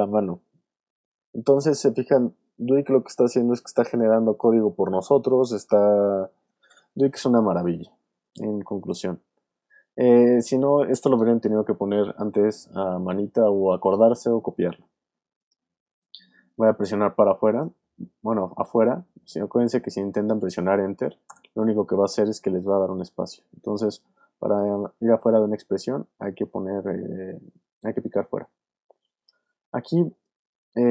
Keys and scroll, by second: 21.3 Return.